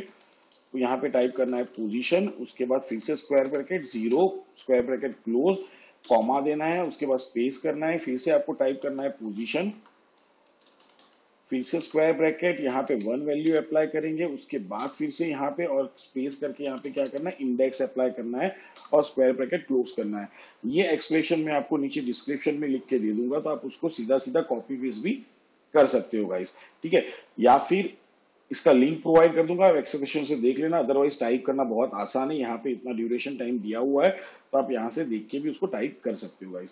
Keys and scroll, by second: 0.0-4.1 typing, 6.1 ', 6.9 space, 8.3-11.9 typing, 12.9 1, 13.5 ], 14.8-18.8 typing.